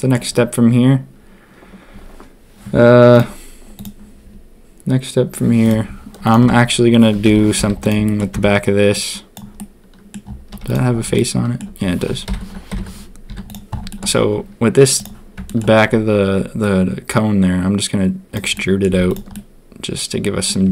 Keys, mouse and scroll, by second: 6.2 click, 6.4 Tab, 7.2 ctrl+KP_3, 7.5 z, 8.0 shift+click, 8.3 b, 9.5 middle click, 10.5 z, 11.1 shift+middle click, 11.3 shift+click, 12.7 ctrl+KP_3, 13.2 z, 13.8 shift+click, 14.9 click, 15.4 shift+click, 18.5 click, 18.8 z, 19.3-20.5 drag, 20.6 a.